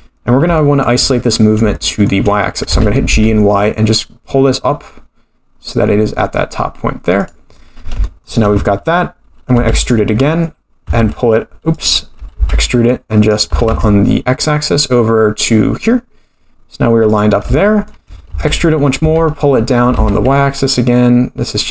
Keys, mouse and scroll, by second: 0.5 scroll down 1, 0.6 shift+middle click, 1.2-1.6 scroll up 4, 1.7 shift+middle click, 2.7 g, 8.0 shift+middle click, 9.5 e, 10.8 x, 12.3 e, 13.4 g, 17.5 shift+middle click, 18.3 e, 18.9 g.